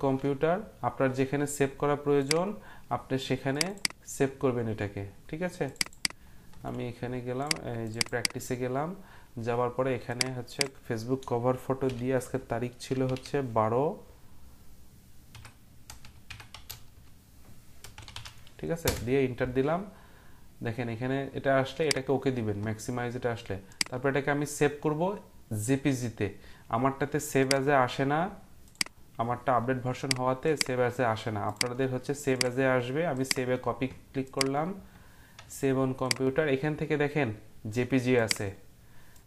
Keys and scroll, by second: 11.8-13.6 typing, 15.1-20.2 typing, 18.8 Return.